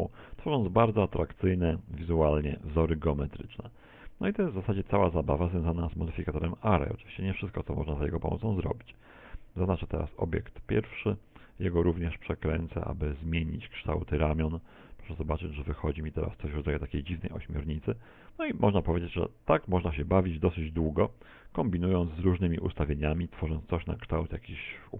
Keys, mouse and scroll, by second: 1.5 middle click, 1.6 middle click, 2.4 shift+middle click, 3.2-4.0 scroll up 3, 4.6 middle click, 5.3 shift+middle click, 6.2 r, 9.1 click, 10.2 click, 11.4 r, 15.0 click, 15.0-15.4 scroll down 2, 15.4 shift+middle click, 16.2 middle click, 18.3 click, 19.1 r, 23.0 click, 23.3 middle click.